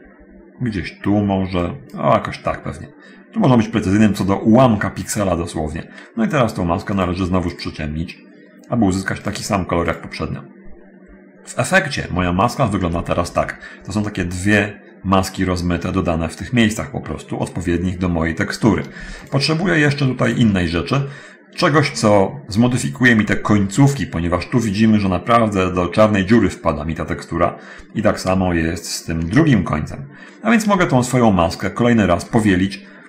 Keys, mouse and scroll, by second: 1.9 click, 7.1 click, 7.7 click, 9.5 click, 10.0 click, 19.5 ctrl+shift+click, 20.1 ctrl+shift+click, 28.7 ctrl+shift+click, 30.8-33.0 ctrl+shift+drag.